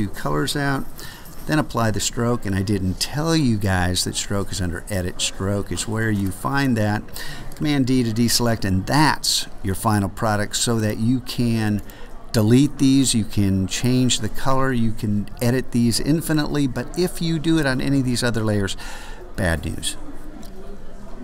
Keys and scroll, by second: 1.1 ctrl+alt+super+s, 7.6 super+d.